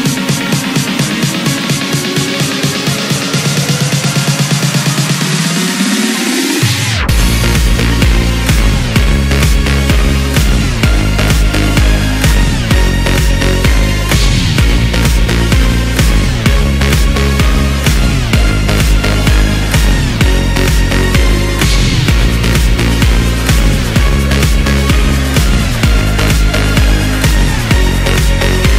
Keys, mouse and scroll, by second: 0.2 s, 5.6 ctrl+b, 12.6-13.9 scroll up 1, 13.9 ctrl+r, 16.1-16.5 scroll down 1, 16.5 Tab, 17.0-18.1 middle drag, 18.1 KP_1, 19.1 s, 23.6-24.6 middle drag, 24.6 scroll down 2, 24.9-25.4 middle drag, 25.4-25.7 scroll up 1, 25.7-26.4 middle drag, 26.4-27.1 scroll up 1, 27.1 s.